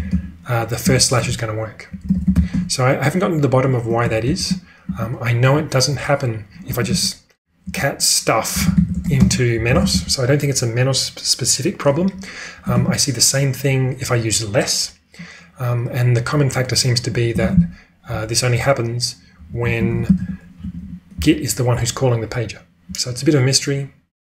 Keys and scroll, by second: 0.0-2.8 typing, 4.2-5.3 typing, 6.4-10.3 typing, 12.7 ctrl+u, 17.4 ctrl+space, 18.0 1, 19.2-21.6 typing, 23.1 typing.